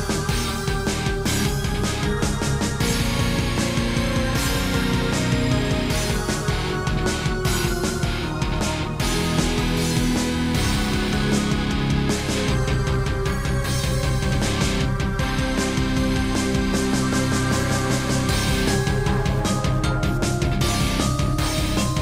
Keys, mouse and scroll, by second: 0.3 shift+middle click, 1.4 r, 2.9 click, 3.8 click, 4.5 shift+middle click, 5.0 typing, 6.0 click, 8.7 g, 9.5 click, 10.8 click, 10.9 click, 11.5 g, 12.3 Escape, 12.8 r, 14.3 click, 16.0 r, 17.0 click, 17.4 scroll down 1, 18.3 click, 19.4 shift+click, 20.4 shift+click, 21.0 g.